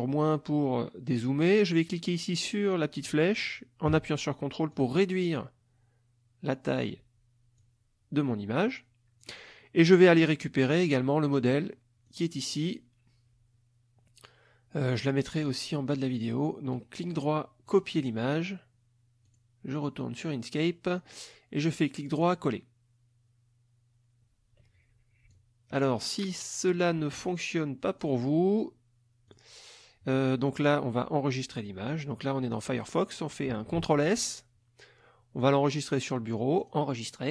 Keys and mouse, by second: 4.7-7.0 ctrl+drag, 7.6 click, 10.7 click, 12.0 click, 16.7 right click, 17.7 click, 19.2 click, 21.1 right click, 22.2 click, 25.3-27.0 ctrl+drag, 27.2 ctrl+click, 29.3 click, 33.8 ctrl+s, 35.4 click, 36.6 click.